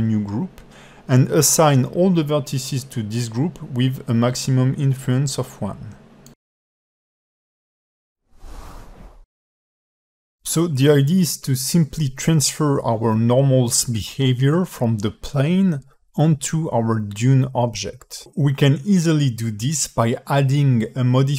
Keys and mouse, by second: 2.6 click, 7.0 click, 8.3 Tab, 9.9 click, 10.7 g, 11.8 drag, 19.7 click, 20.8-21.3 drag.